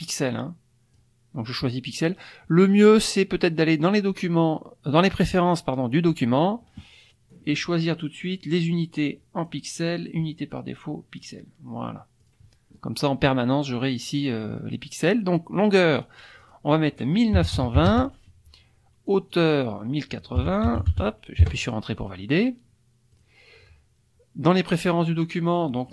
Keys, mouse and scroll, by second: 5.9 click, 7.3 click, 8.4-9.6 drag, 10.3-11.4 drag, 12.2 click, 15.9 click, 17.3 KP_1, 17.5 KP_9, 17.8 KP_2, 17.9 KP_0, 19.1 click, 20.4 KP_1, 20.7 KP_0, 20.8 KP_8, 20.9 KP_0, 21.4 KP_Enter, 23.1 click, 24.7 click.